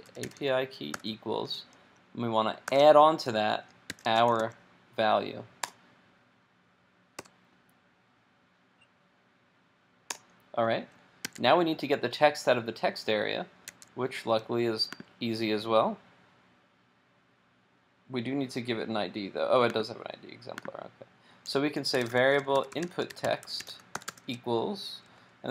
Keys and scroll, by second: 11.3 super+Tab, 13.7 super+Tab.